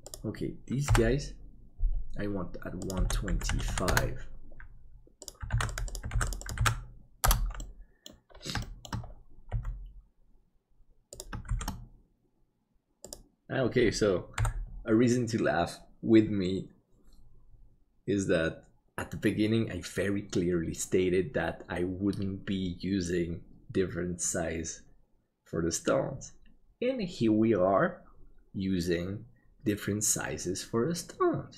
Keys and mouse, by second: 0.9 n, 3.9-5.8 drag, 6.1 ctrl+click, 6.6-7.7 ctrl+drag, 7.7 middle click, 8.7 shift+middle click, 9.5 g, 11.5 shift+d, 14.3 n.